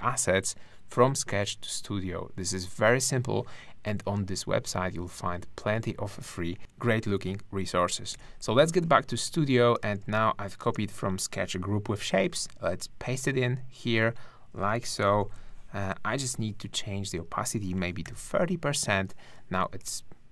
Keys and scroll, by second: 8.1 ctrl+Left, 10.0 space, 12.3 super+v, 15.3 super+2, 18.0 3, 19.6 space.